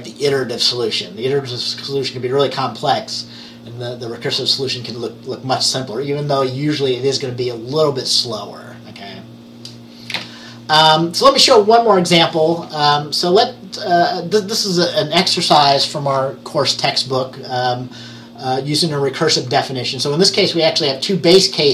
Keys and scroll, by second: 10.3 Page_Down.